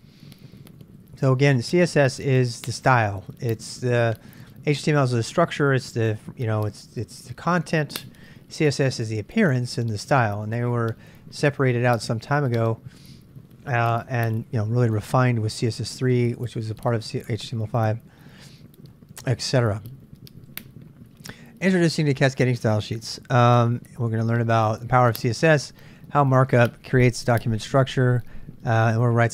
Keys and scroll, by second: 17.9 j, 18.1 j.